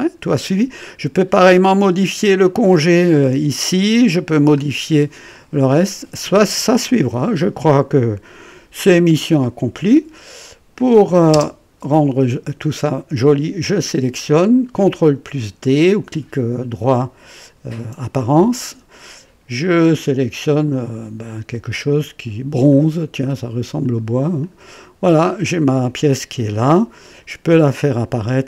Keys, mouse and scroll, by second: 1.9 scroll up 2, 2.4 click, 3.9 click, 4.7-5.1 scroll down 1, 5.3 click, 6.6 click, 7.5-9.4 drag, 11.3 space, 13.5 click, 17.5 d, 19.9 click, 22.6 click, 23.8 click, 24.4 click, 25.2 scroll up 1, 25.8-27.2 drag, 27.7 right click.